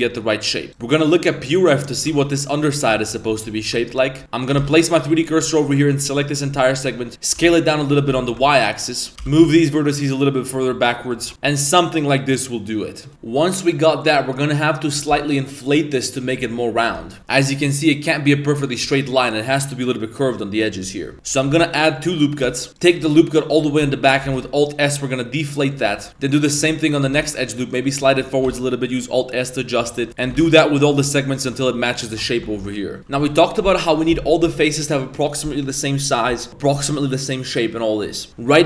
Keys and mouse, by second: 0.0 Tab, 0.5 middle click, 1.5-2.0 middle drag, 2.1 Tab, 2.2-2.5 middle drag, 2.7 middle click, 2.9 shift+middle drag, 3.3 middle click, 3.6 Tab, 3.8 middle click, 4.1 1, 4.2 shift+s, 4.3 right click, 4.7 shift+s, 5.1 middle click, 5.9 ctrl+right click, 6.6 middle click, 7.4 s, 9.1 g, 10.9 middle click, 11.2 Tab, 11.3 middle click, 11.5-12.0 middle drag, 12.2-13.1 middle drag, 13.1 Tab, 16.2 middle click, 16.9 KP_7, 17.2 Tab, 17.2 z, 21.1 Tab, 21.1 z, 21.4 ctrl+r, 22.5 shift+middle drag, 22.7 alt+right click, 22.7 1, 24.3 alt+s, 25.9 z, 26.1 alt+s, 26.6 s, 27.1 g, 29.6 alt+s, 29.9 alt+right click, 30.1 g, 30.4 alt+s, 31.5 Tab, 32.1 Tab, 32.3 alt+right click, 33.0 2, 33.0 a, 33.0 3, 33.4-33.8 middle drag, 34.2 middle drag, 34.8 middle click.